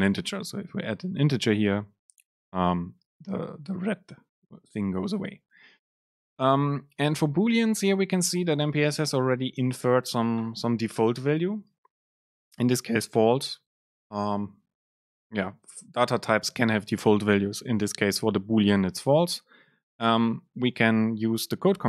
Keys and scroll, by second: 0.3 Up, 0.5 Down, 8.7 super+space.